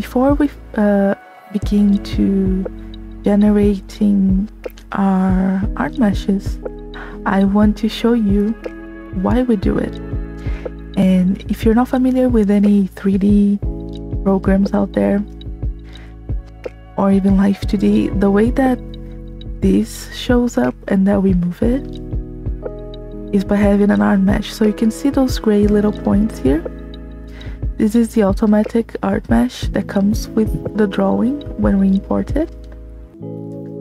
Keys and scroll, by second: 8.0 space, 15.5 space.